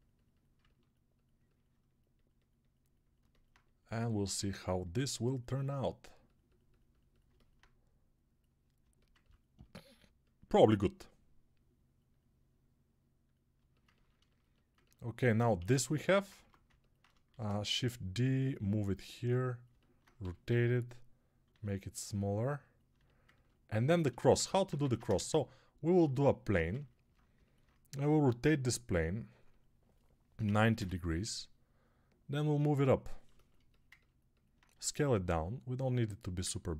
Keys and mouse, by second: 8.7-13.4 alt+middle drag, 13.4-21.3 ctrl+alt+drag, 15.5 alt+q, 16.2 Tab, 17.2 shift+d, 20.1 g, 21.3-29.3 middle drag, 21.3 s, 24.7 ctrl+Tab, 25.0 shift+a, 26.3 Tab, 29.3-36.3 drag, 33.1 alt+shift+middle click, 33.6 ctrl+alt+middle click, 34.6 s, 36.3-36.7 ctrl+alt+middle drag.